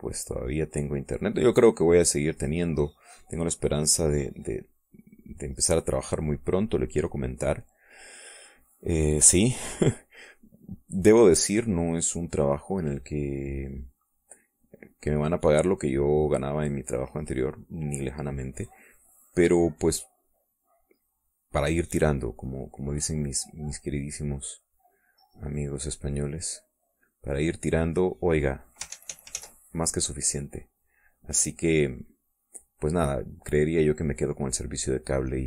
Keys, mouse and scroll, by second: 3.8-5.8 drag, 6.3 middle click, 6.8-8.6 drag, 9.6 click, 9.7 click, 10.2 click, 11.1 click, 13.2 middle click, 14.8-21.1 drag, 21.3 middle click, 22.6 middle click, 24.0-29.2 drag, 29.6 ctrl+z, 30.7-32.1 drag, 32.4-33.4 middle drag, 33.4 middle click, 33.9-34.9 middle drag, 35.0 middle click.